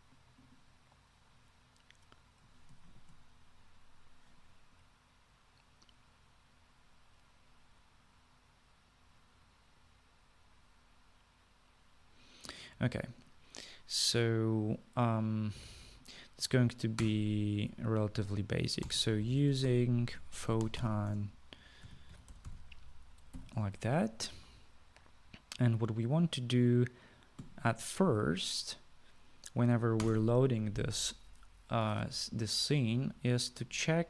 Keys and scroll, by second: 18.2 Return, 19.8-24.5 typing, 31.2 Return.